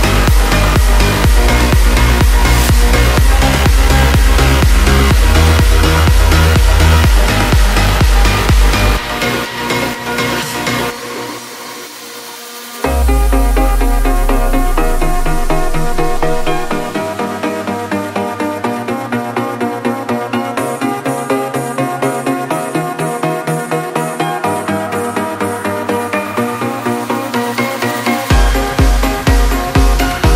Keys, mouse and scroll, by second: 13.5 shift+Num_Lock, 14.0 shift+click, 18.2 ctrl+g, 21.9 click, 24.5 click.